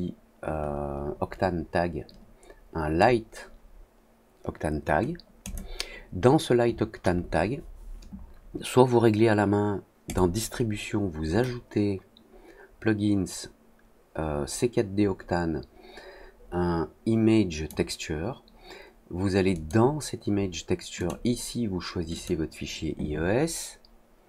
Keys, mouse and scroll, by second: 5.4 click, 10.0-17.6 drag, 19.5 click, 20.9 click, 22.1 click.